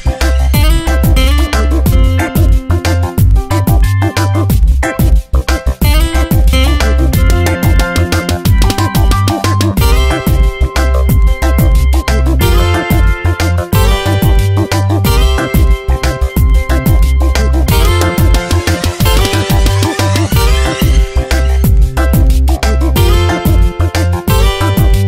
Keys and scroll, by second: 1.6 space, 4.6 Tab, 5.2 e, 8.2 space, 8.8 v, 10.4 ctrl+t, 13.0 Return, 14.2 Tab, 14.8 space, 18.4 space, 19.8 Delete, 20.7 ctrl+d, 21.0 v, 22.8 v, 23.6 Tab, 24.5 s.